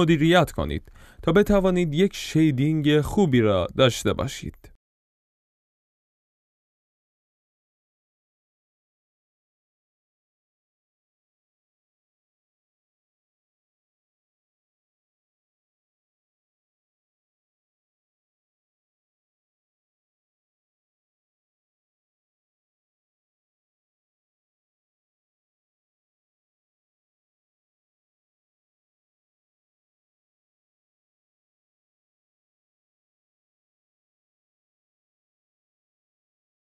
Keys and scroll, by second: 2.4 F11, 4.0 alt+Tab.